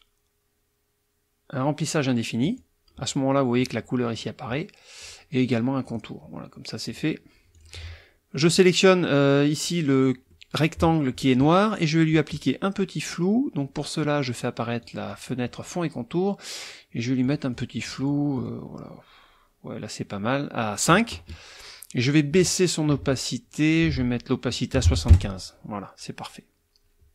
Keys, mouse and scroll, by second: 2.4 click, 5.0 click, 5.8 click, 6.9 click, 7.5 click, 8.4 click, 10.3 middle click, 14.8 click, 17.2 click, 18.3 click, 23.7 ctrl+click, 23.9 ctrl+a, 24.7 KP_7, 24.8 KP_5, 25.1 KP_Enter.